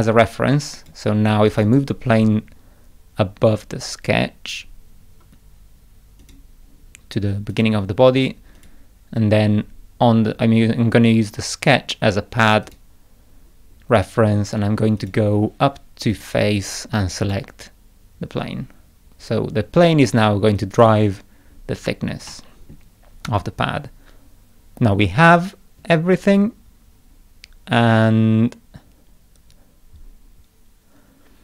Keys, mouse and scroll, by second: 0.8 click, 1.5 click, 1.7 right click, 6.2 click, 7.5 click, 8.6 click, 12.7 click, 15.0 click, 16.1 click, 17.2 click, 20.6 click, 22.3 middle click.